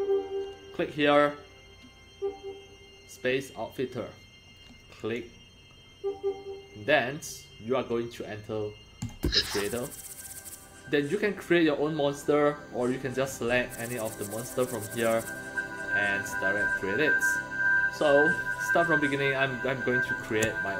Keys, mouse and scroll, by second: 5.0 click, 9.0 click, 13.2-13.6 scroll down 2, 14.5 scroll up 1, 15.8-16.7 scroll up 3, 20.2 click.